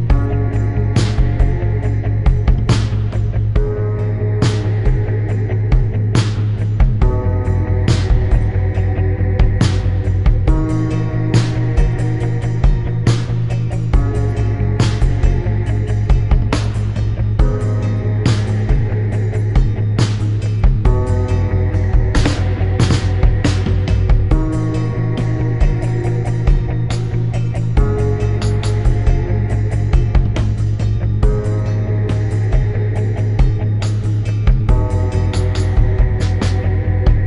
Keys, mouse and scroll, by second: 0.7 click, 1.3 click, 3.8 shift+click, 4.3 shift+click, 5.2 click, 7.6 click, 8.3 click, 14.1 click, 14.6 click, 16.2 click, 17.0 click, 18.9 shift+click, 20.5 click, 23.2 shift+click, 24.4 click, 25.5 Delete, 25.6 End, 26.1 click, 26.7 click, 29.9 click, 30.3 click.